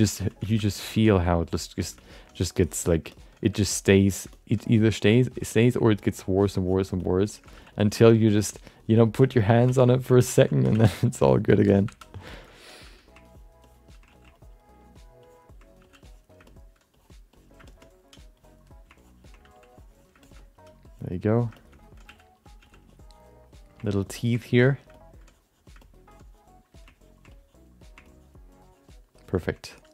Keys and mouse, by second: 0.2 ctrl+alt+middle click, 0.4 alt+shift+middle click, 0.5 alt+middle click, 0.8 ctrl+alt+middle click, 1.1 f, 1.4 click, 1.8 alt+shift+middle click, 2.3 click, 3.1 alt+middle click, 3.4 f, 3.6 click, 4.3 alt+middle click, 4.7 click, 5.1 middle click, 5.4 click, 6.4 click, 7.0 alt+middle click, 7.3 shift+middle click, 7.5 f, 7.8 alt+click, 8.1 right click, 8.3 f, 8.5 click, 9.0 click, 9.2 shift+middle click, 9.3 middle click, 9.6 f, 9.9 shift+middle click, 10.1 middle click, 10.4 ctrl+middle click, 10.7 f, 11.2 alt+shift+middle click, 11.5 alt+middle click, 11.9 2, 12.3 alt+shift+middle click, 12.4 alt+middle click, 12.8 f, 13.2 ctrl+click, 13.6 ctrl+click, 14.2 f, 14.3 ctrl+click, 14.6 ctrl+click, 15.2 ctrl+click, 15.7 f, 16.0 click, 16.4 middle click, 17.3 click, 17.7 alt+shift+middle click, 18.3 click, 19.0 ctrl+click, 19.5 click, 19.7 click, 20.2 alt+shift+middle click, 20.2 alt+shift+right click, 20.4 alt+middle click, 20.9 click, 21.3 click, 21.5 alt+shift+middle click, 21.7 middle click, 22.0 f, 22.4 click, 22.6 f, 22.8 click, 24.2 ctrl+click, 24.4 click, 24.9 middle click, 25.2 click, 26.1 click, 27.0 ctrl+click, 27.4 click, 28.0 ctrl+click, 28.5 ctrl+click, 29.1 ctrl+click, 29.7 click.